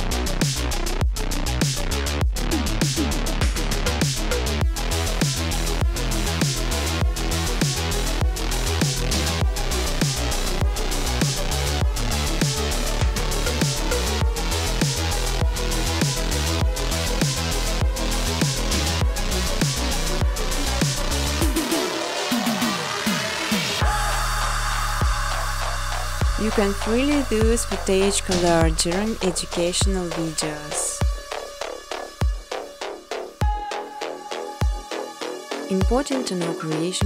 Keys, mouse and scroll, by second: 0.0 scroll, 0.2 click, 1.9-3.4 typing, 4.5-5.2 typing, 6.7 click, 6.9 click, 11.3 click, 12.4 1, 13.6 ., 15.2 9, 16.2 9, 17.5 Tab, 17.9 Return, 19.5 click, 22.2-24.5 typing, 26.1-26.9 typing, 34.8 click, 35.4-36.6 typing.